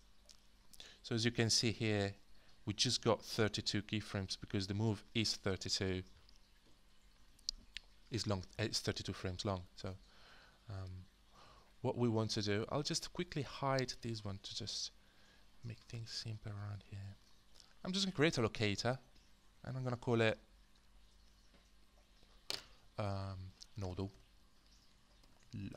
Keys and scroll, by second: 0.0-19.5 typing, 18.3 alt+space, 23.5-25.7 typing.